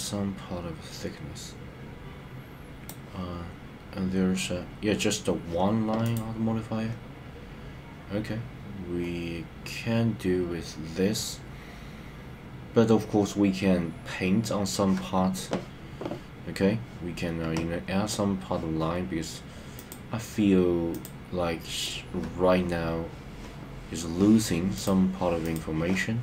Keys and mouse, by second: 6.1 click, 20.0-21.2 drag, 24.8 click.